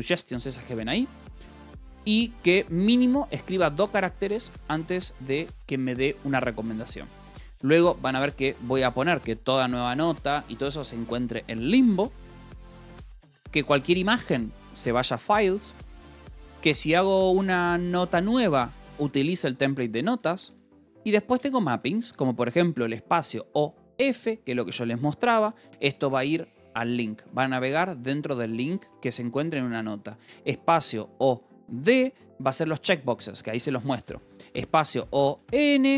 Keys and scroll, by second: 0.0 Escape, 0.7-2.8 typing, 8.3 shift+v, 8.7 j, 12.1 Escape, 12.5 j, 13.0 j, 15.4 Escape, 15.8 j, 16.3 j, 17.1 k, 17.5 j, 18.6 Escape, 18.8-22.1 typing, 20.0 Escape, 21.9 Escape, 25.1 j, 25.6 k, 27.6 j, 28.5 k, 29.2 j, 34.8-35.9 typing.